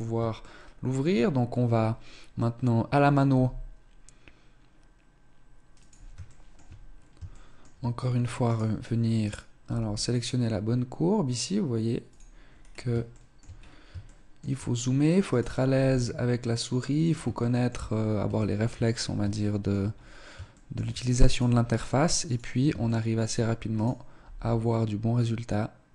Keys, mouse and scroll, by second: 0.3 shift+middle click, 1.8-2.4 scroll up 1, 2.4 scroll up 1, 3.2 g, 6.3 shift+middle click, 6.8 scroll down 3, 7.2 shift+middle click, 8.4 right click, 9.1 right click, 9.5 g, 12.0 click, 12.4 scroll down 4, 13.0 shift+middle click, 13.1-13.8 scroll up 5, 13.9 shift+middle click, 15.2 right click, 15.6 g, 17.2 shift+middle click, 17.8 scroll down 1, 18.2 shift+middle click, 18.5-18.9 scroll down 4, 19.2 shift+middle click, 19.8-20.1 scroll up 4, 20.4 shift+middle click, 21.2 right click, 21.3 g, 22.7 shift+middle click, 23.6 right click, 24.0 g.